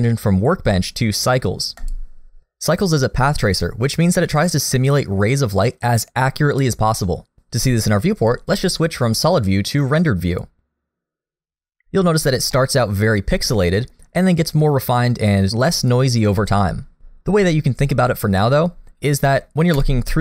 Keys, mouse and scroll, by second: 10.5 click, 12.6 middle click, 19.7 KP_0.